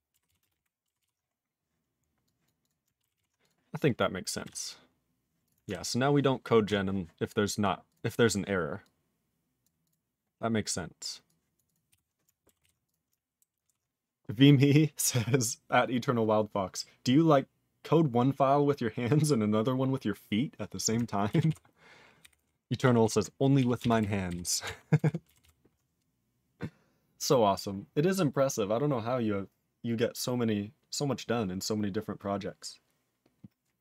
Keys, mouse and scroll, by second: 0.3 ctrl+s, 0.4 ctrl+space, 0.4 ctrl+e, 0.5 ctrl+g, 1.0 ctrl+s, 1.3 scroll down 2, 2.2 click, 2.4 click, 2.6 click, 2.6 click, 3.1 ctrl+s, 3.4 click, 3.5 click, 3.7 scroll down 2, 11.9 q, 12.6 ctrl+s, 12.8 click, 12.9 click, 13.6 ctrl+s, 21.4 ctrl+s, 22.2 ctrl+n, 22.3 ctrl+e, 23.0 ctrl+s, 23.6 ctrl+a, 23.7 ctrl+space, 23.8 ctrl+e, 24.0 ctrl+g, 24.2 ctrl+b, 24.6 ctrl+alt+f, 24.9 ctrl+alt+b, 25.4 ctrl+s.